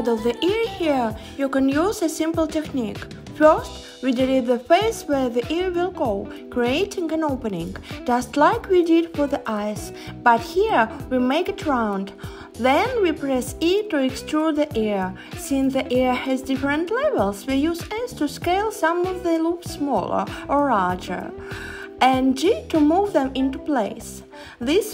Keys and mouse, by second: 0.2 click, 0.6-1.8 drag, 2.5 s, 5.5 e, 6.1 s, 9.1 click, 11.4 click, 14.0 click, 15.7 click, 16.2 click, 17.8 alt+shift+click, 18.7 h, 21.3 h, 22.8 alt+shift+click, 23.5 h.